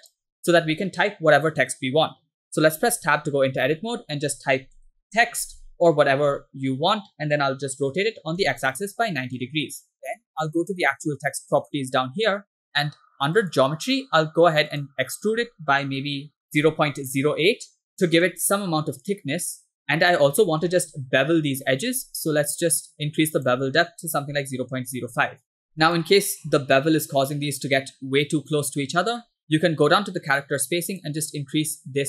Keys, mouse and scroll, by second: 3.0 Tab, 3.7-5.2 typing, 5.7 Tab, 6.4 r, 11.7 click, 13.5 click, 14.8-17.4 drag, 18.1 middle click, 18.1-18.6 scroll up 4, 19.6 middle drag, 20.4-20.8 shift+middle drag, 20.8 scroll up 3, 23.5-25.4 drag, 26.1-26.7 shift+middle drag, 26.7 scroll up 3, 29.2-29.7 scroll down 7, 31.0 click.